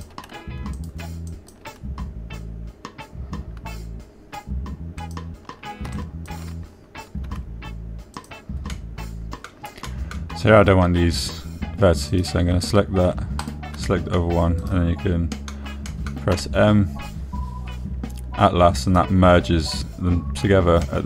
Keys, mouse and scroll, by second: 0.8 click, 1.2 click, 2.1 click, 2.8 click, 6.4 click, 7.4 shift+click, 8.6 e, 9.5 click, 10.1 click, 11.2 click, 13.5 click, 15.2 click, 16.0-17.0 middle drag, 17.3 middle click, 17.7 m.